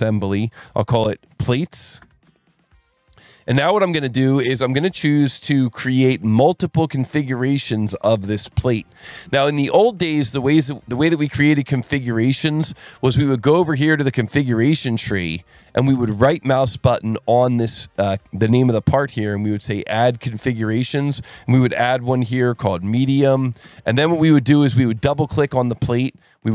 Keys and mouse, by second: 0.1-2.0 typing, 2.3 Return, 3.4 click, 4.9 click, 7.9 click, 9.1 click, 10.6 click, 11.7 click, 14.4 click, 18.6 right click, 20.5 click, 22.4-23.8 typing, 25.4 click.